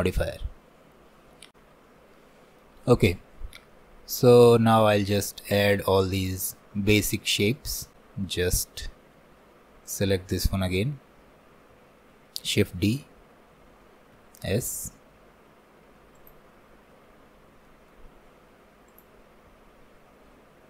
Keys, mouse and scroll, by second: 0.5-1.2 scroll up 1, 2.2-4.7 middle drag, 5.0 alt+middle click, 5.6-9.9 shift+middle drag, 9.9-12.6 drag, 12.6 shift+d, 16.9-17.4 scroll up 1, 17.7 shift+middle click, 18.1-18.9 scroll up 1, 18.9 click, 19.6 scroll up 1, 20.5-20.6 scroll down 1.